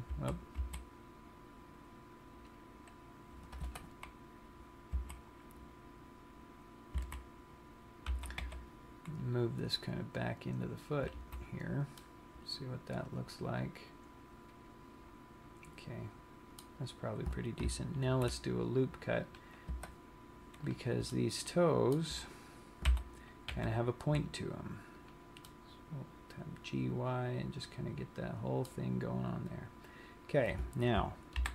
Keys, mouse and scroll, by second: 0.3 g, 5.5 a, 7.5 a, 8.9 g, 11.6 click, 11.6 z, 12.2 middle click, 18.2 ctrl+r, 20.9 click, 21.4 middle click, 23.2 g, 25.3 click, 25.6 middle click, 31.4 ctrl+l.